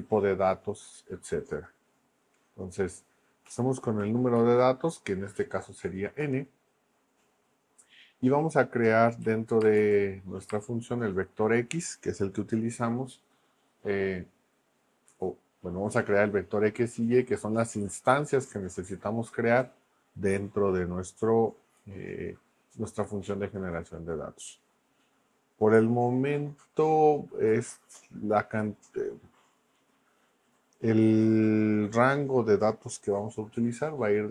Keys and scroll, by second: 3.4 Right, 4.4 shift+;, 6.2 Return, 9.2 x, 9.6 space, 9.8 =, 10.5 space.